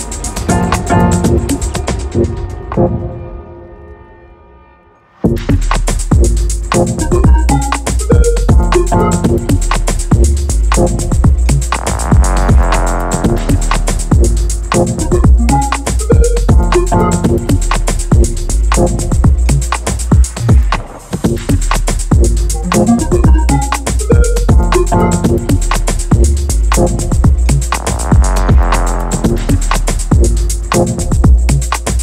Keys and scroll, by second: 0.2 x, 0.4 shift+c, 1.5 x, 2.0 x, 4.1 3, 4.4 2, 7.9 shift+Down, 8.3 \, 8.4 BackSpace, 8.6 Return, 9.2 ctrl+r, 9.9 x, 13.9 Delete, 14.2 ctrl+z, 14.4 shift+c, 16.6 Delete, 16.8 x, 17.4 Delete, 17.9 Delete, 18.4 Delete, 19.5 Delete, 20.4 Delete, 23.8 Delete, 24.1 Delete, 24.3 Delete, 25.8 ctrl+l, 31.9 x.